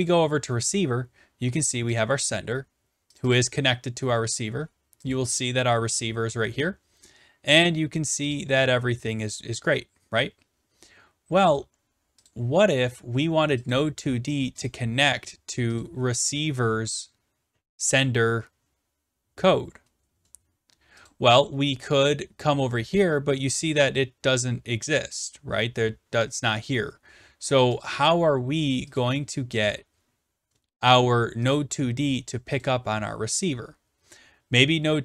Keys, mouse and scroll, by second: 0.0 click, 2.0 click, 3.0 click, 3.2 click, 5.1 click, 7.6 click, 8.4 click, 12.3 click, 13.7 click, 14.7 click, 15.6 click, 15.9 click, 21.1 click, 22.2-23.5 scroll down 9, 23.7 scroll, 27.8 click, 29.6 click, 31.6 click.